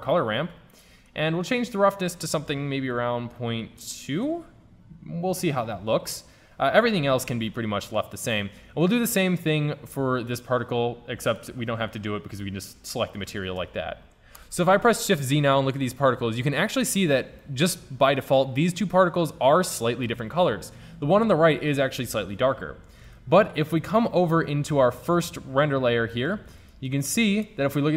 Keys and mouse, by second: 7.6 middle click, 13.2-14.4 middle drag, 14.6 shift+z, 23.2 shift+z, 27.5 shift+z.